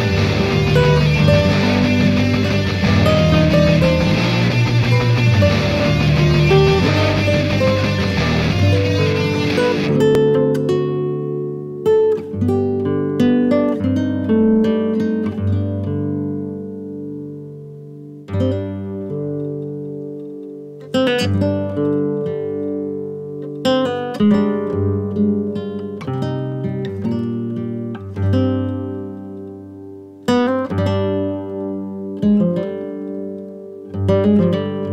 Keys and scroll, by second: 1.9 5, 2.1 Return, 9.7 ctrl+Page_Down, 21.4 ctrl+Page_Down, 32.3 shift+F2, 32.9 Escape, 33.4 F4.